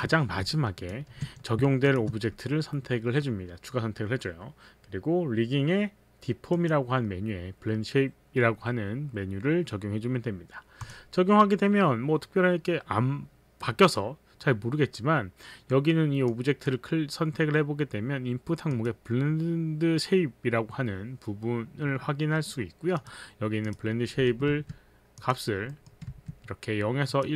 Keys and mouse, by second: 0.8 ctrl+click, 1.9 shift+click, 6.5 click, 10.8 click, 16.2 click, 18.8 click, 23.0 click, 23.7 click, 24.2 middle click, 24.6 z, 25.2 click, 25.8 middle click, 26.2 middle click, 26.2 z.